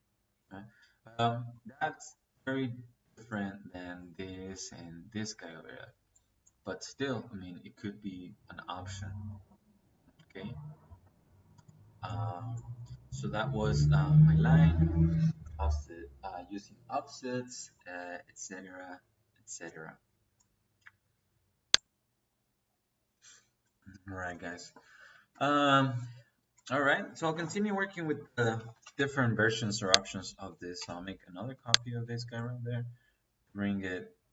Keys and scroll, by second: 27.7 Escape, 28.2-28.9 typing, 30.7 space.